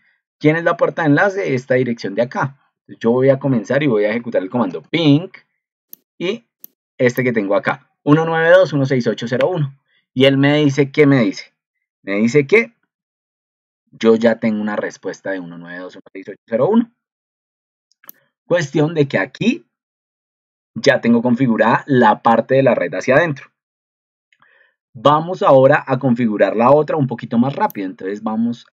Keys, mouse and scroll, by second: 0.8 ctrl+2, 12.8 ctrl+2.